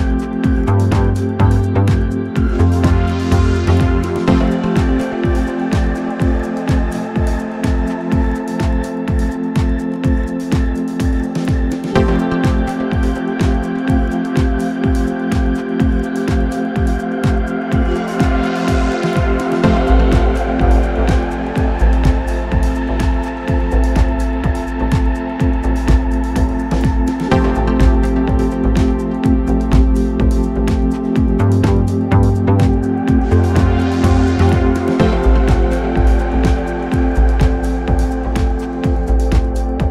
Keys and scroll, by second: 2.0 Delete, 2.7 ], 6.1 ], 8.2 ctrl+d, 8.4 Escape, 12.6 4, 16.3 3, 16.5 ], 16.8 ], 19.0 ], 19.7 4, 22.0 3, 28.2 3, 34.5 2, 35.3 3.